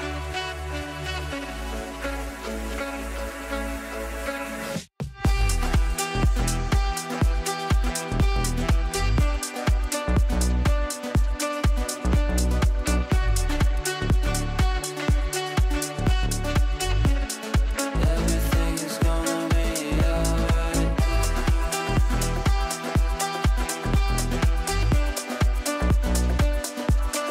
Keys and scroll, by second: 2.1 ctrl+q.